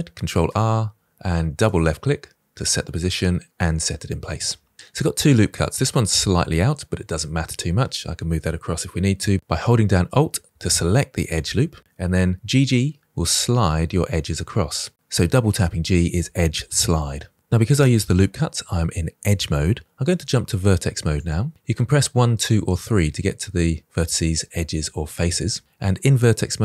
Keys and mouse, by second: 0.1 ctrl+r, 5.4-6.4 drag, 12.6 g, 12.7 g, 21.1 click, 26.5 click.